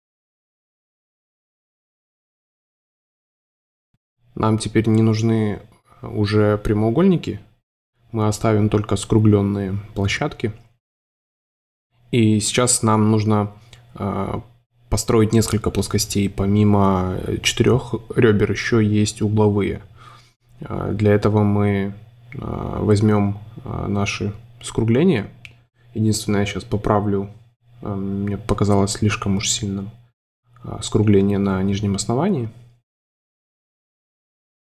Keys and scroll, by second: 0.2 c, 1.8 Delete, 2.6 Delete, 3.5 Delete, 5.5 Delete, 7.5 space, 8.6 a, 12.7 super+z, 14.9 super+c, 16.7 Delete, 18.8 Delete, 24.4 space, 27.6 space, 29.7 Delete, 31.0 Delete, 33.0-34.0 typing.